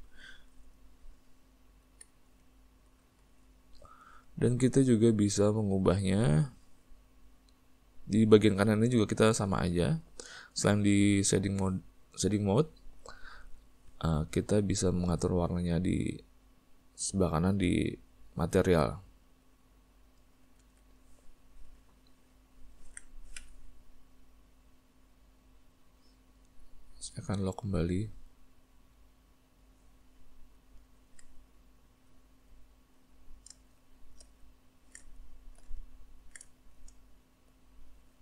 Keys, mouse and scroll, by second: 0.0 click, 2.1 z, 3.5 Tab, 4.4-10.0 ctrl+middle drag, 10.0 click, 19.6 click, 22.0-23.6 ctrl+middle drag, 23.6 n, 29.5 click, 30.2-33.3 ctrl+middle drag, 33.3 click, 33.8-37.7 shift+middle drag, 37.7 click.